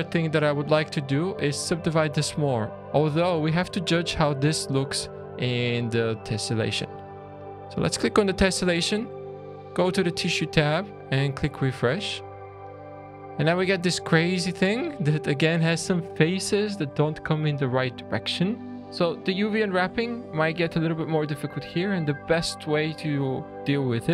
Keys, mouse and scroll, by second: 1.9-2.4 scroll down 4, 2.4 middle click, 2.7 middle click, 2.7-3.0 scroll down 4, 3.0 middle click, 5.7 middle click, 7.2 click, 10.4 click, 11.4 click, 13.2 scroll down 2, 13.7 shift+middle click, 18.8-19.2 shift+scroll down 3, 18.8 click, 18.8 middle click, 24.0-24.1 scroll up 4.